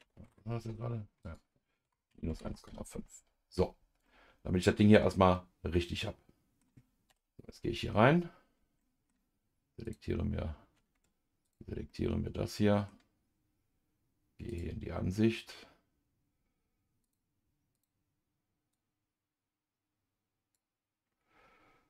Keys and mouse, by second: 1.2-2.9 drag, 4.0 middle click, 5.3-6.6 middle drag, 7.1 KP_Divide, 8.8 middle click, 9.8 click, 10.9 Tab, 11.4 click, 11.9-12.9 middle drag, 14.5 click, 17.0 click, 17.7 click, 18.7-20.5 drag.